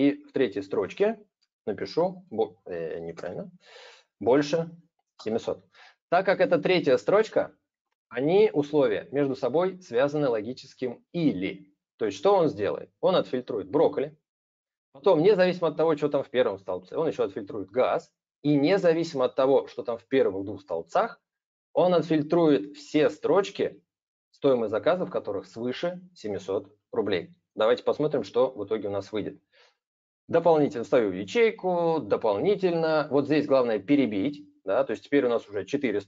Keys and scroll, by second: 1.4 super+space, 2.9 super+space.